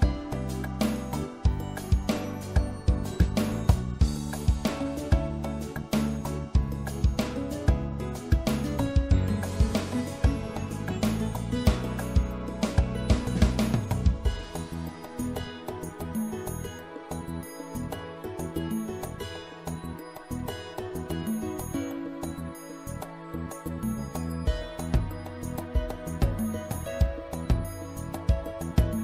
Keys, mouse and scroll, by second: 0.2-4.5 middle drag, 8.9 middle click, 10.0-13.1 middle drag, 16.3-18.0 middle drag, 24.1-26.2 middle drag, 28.8-29.0 middle drag.